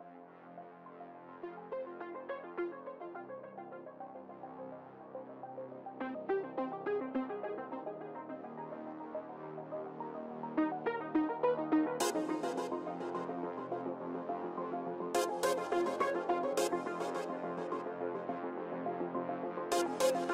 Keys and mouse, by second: 3.3-4.3 right drag, 5.5 v, 9.6 c, 12.5-15.6 middle drag, 14.2 KP_1, 15.6 shift+d, 16.5-18.4 drag.